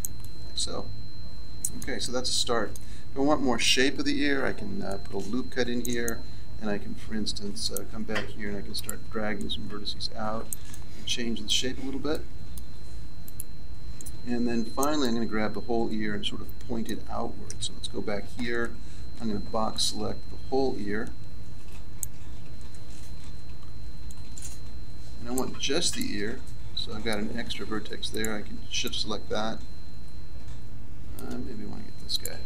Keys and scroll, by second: 4.3 ctrl+r, 17.4 z, 19.1 b, 23.1 b.